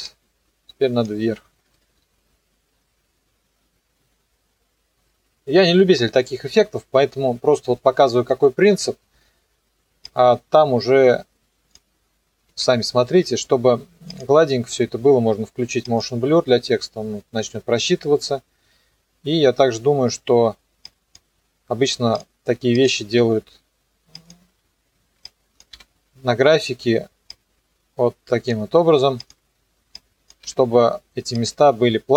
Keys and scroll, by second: 1.7 KP_0, 9.1 space, 12.5 F4, 25.7 F9, 30.4 F9.